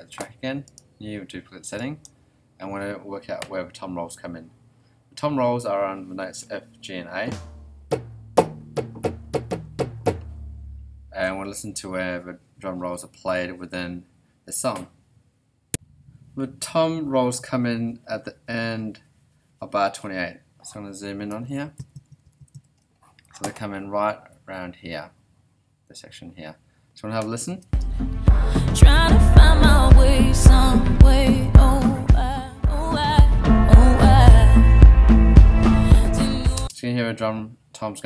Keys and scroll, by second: 21.8 ctrl+alt+Right, 27.6 space, 36.5 space.